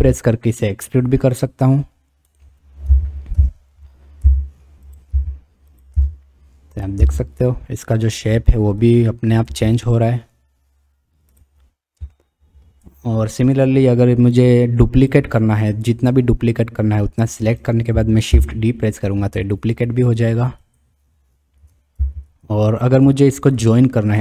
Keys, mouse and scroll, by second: 2.9 ctrl+z, 3.3-7.0 typing, 9.5 e, 12.2 shift+middle click, 12.6 shift+click, 13.7-15.1 drag, 16.3-17.6 drag, 18.4 shift+d, 22.0 ctrl+z, 23.8 shift+click.